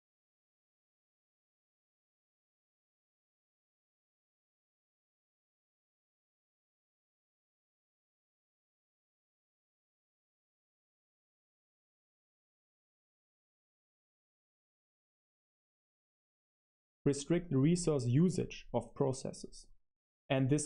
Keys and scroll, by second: 1.4-17.2 typing.